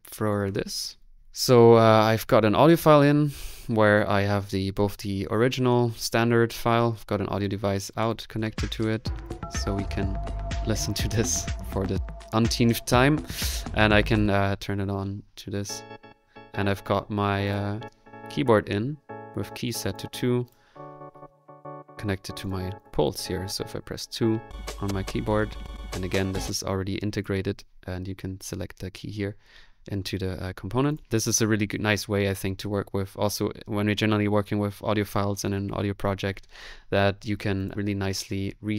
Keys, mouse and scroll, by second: 0.3 right click, 0.5 Delete, 1.0 right click, 1.2 click, 2.2 click, 2.7 click, 3.9 click, 7.4 click, 8.0 click, 9.3 click, 11.8 click, 12.9 click, 12.9 typing, 14.1 click, 16.4 typing, 19.9 click, 20.7 click, 22.4 click, 22.4 typing, 22.6 click, 23.6 click, 24.7-26.2 typing, 25.8-38.7 middle drag, 27.2 space.